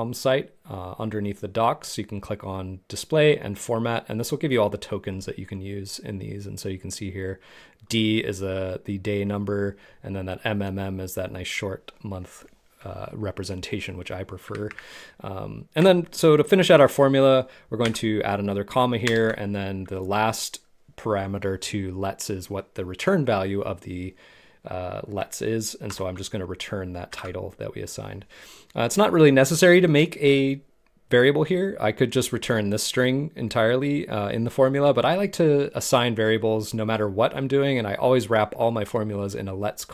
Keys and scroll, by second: 14.7 super+Tab, 19.0 shift+Return.